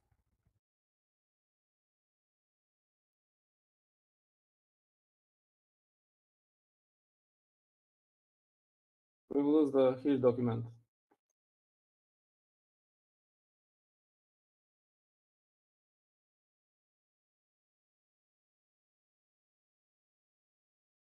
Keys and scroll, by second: 2.2 Up, 2.7 Up, 2.8 Up, 4.2 Down, 6.5 typing, 7.8-11.2 typing, 12.8-13.3 typing, 14.7 typing, 16.4-18.7 typing.